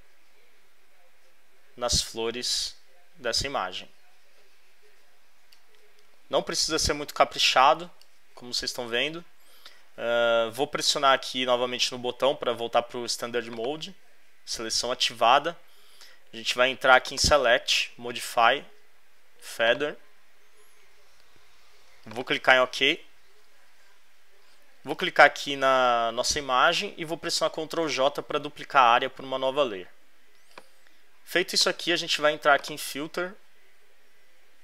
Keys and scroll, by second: 27.8 super+j.